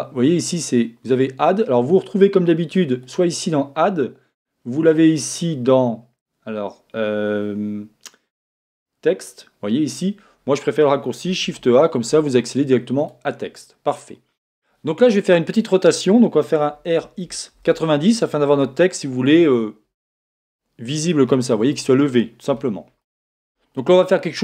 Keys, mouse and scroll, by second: 11.4 shift+a, 16.7 r, 20.3-24.4 middle drag, 21.9-22.6 scroll up 1, 22.6 scroll up 1.